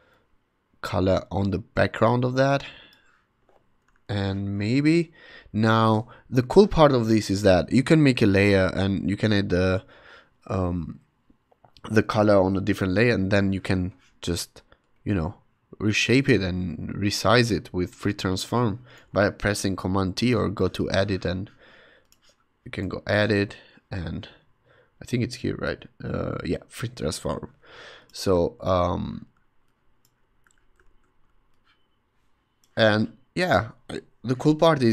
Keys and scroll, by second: 4.1 super+t, 6.5 ↺, 7.5 ↺, 13.5 super+t, 28.6 super+t, 30.8 super+z, 34.2 Return.